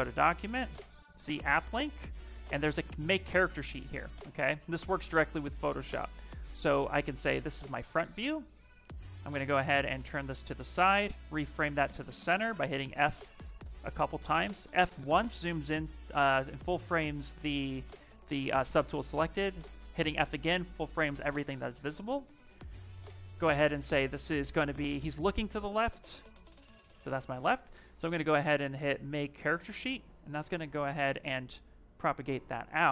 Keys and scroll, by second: 3.7 f, 11.0 f, 12.8 f, 13.4 f, 14.5 f, 19.2 f.